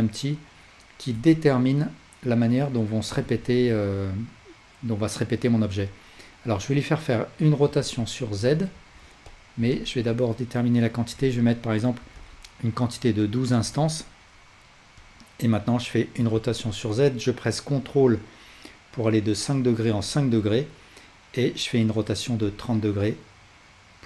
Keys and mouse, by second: 1.2 s, 3.4 ctrl+z, 7.7 r, 8.8 ctrl+z, 9.3 drag, 9.7-15.1 alt+drag, 16.2 r, 22.5-24.0 alt+drag.